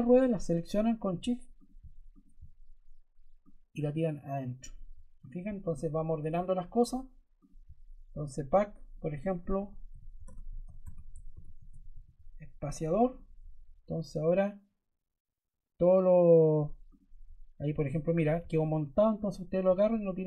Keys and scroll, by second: 0.3 shift+Caps_Lock, 9.0-12.2 typing.